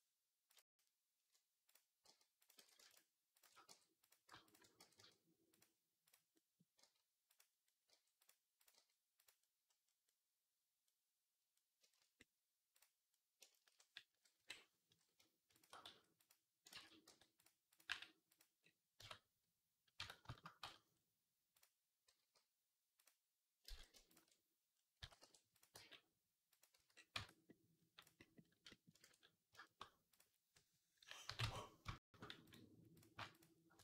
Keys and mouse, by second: 1.9 g, 2.4 ctrl+z, 3.5 g, 4.3-6.2 alt+shift+drag, 4.6 g, 6.2-8.6 right drag, 6.6 g, 7.7 g, 8.6-10.7 drag, 8.6 g, 10.9 click, 11.0 click, 14.2 KP_3, 15.7 s, 16.6 ctrl+z, 16.9 g, 17.7 g, 18.8 Tab, 19.8 Tab, 20.2 shift+middle click, 20.4 z, 22.0 g, 23.5 ctrl+z, 24.8 s, 25.6 g, 26.6 z, 27.0 Tab, 27.0 right click, 27.2 right click, 27.9 right click, 28.9 ctrl+s, 31.1 KP_3, 31.2 Tab, 32.8-33.8 shift+drag.